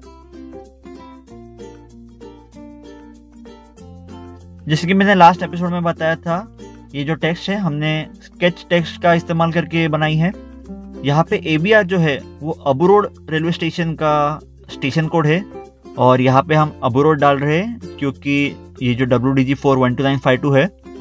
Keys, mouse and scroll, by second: 0.1 click, 0.3 scroll down 1, 0.7 click, 1.6 scroll up 1, 2.0 middle click, 2.3 middle click, 2.6 scroll up 1, 2.7 scroll down 1, 3.4 middle click, 3.7 scroll down 1, 4.1 middle click, 4.3 middle click, 4.6 scroll down 1, 6.3 middle click, 6.3 middle click, 12.6 scroll up 1, 12.8 scroll down 1, 13.3 scroll down 1, 13.5 middle click, 14.0 scroll down 1, 20.8 scroll up 1.